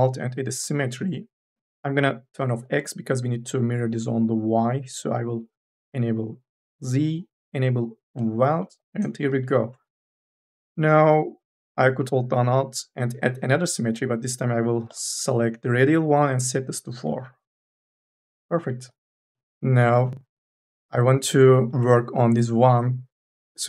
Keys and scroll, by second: 19.5 2.